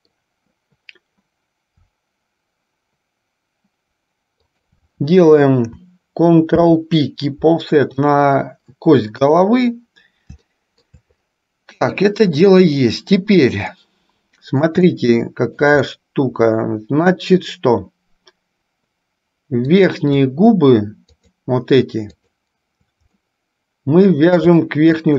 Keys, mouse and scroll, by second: 6.6 ctrl+p, 9.4 KP_3, 10.6 shift+middle click, 13.9-14.9 middle drag, 15.1-17.4 shift+middle drag, 19.9 click, 21.5-23.1 shift+drag, 23.2-24.7 middle drag.